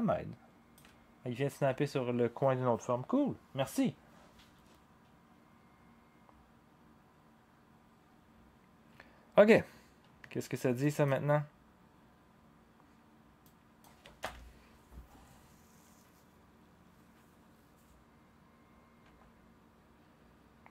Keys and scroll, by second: 14.2 0, 19.0 0.